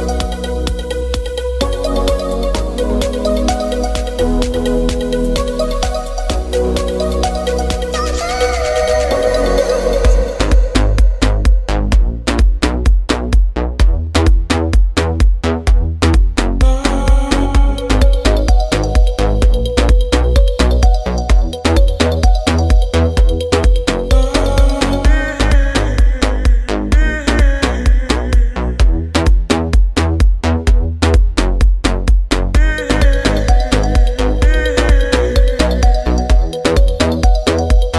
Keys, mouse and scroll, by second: 0.7 middle click, 2.5 click, 4.8 middle click, 5.4 scroll up 1, 5.7-10.1 middle drag, 10.1 ctrl+f, 15.1 click, 21.3 shift+z, 27.5 shift+z, 27.6 ctrl+f, 28.5 space, 32.9 click.